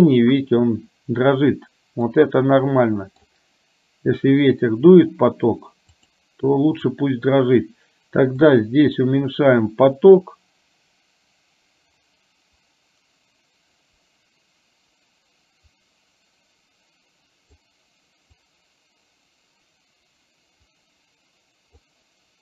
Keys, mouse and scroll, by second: 2.1-3.4 middle drag, 6.0 click, 8.5-17.6 drag, 18.5-22.0 drag.